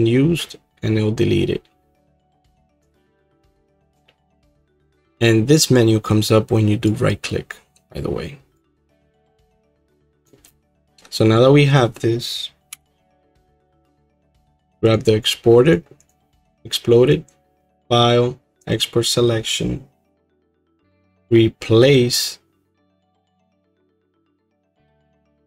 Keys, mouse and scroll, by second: 4.6-10.2 right drag, 10.2 click, 12.7 h, 13.5 click, 13.8 h, 14.9 click, 15.7-18.9 drag, 20.7-25.4 drag.